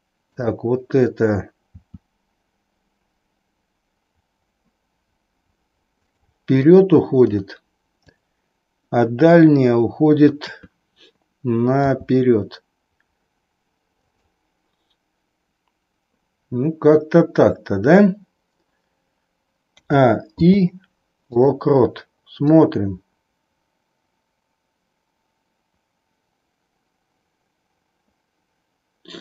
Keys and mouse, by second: 0.3-1.3 drag, 1.9 r, 6.6 middle click, 8.0 click, 10.3 KP_3, 11.7 r, 19.7 a, 20.5 i, 22.6-29.2 drag.